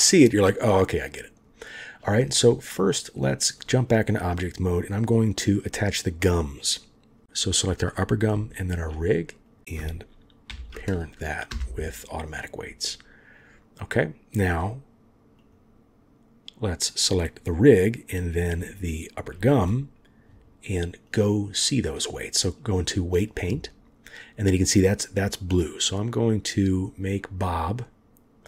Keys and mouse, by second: 3.2-3.6 drag, 5.1 click, 8.5 shift+click, 9.5 click, 10.5 ctrl+p, 15.4 click, 18.8 shift+click, 21.1-22.7 drag, 26.4 click, 27.8-28.4 middle drag.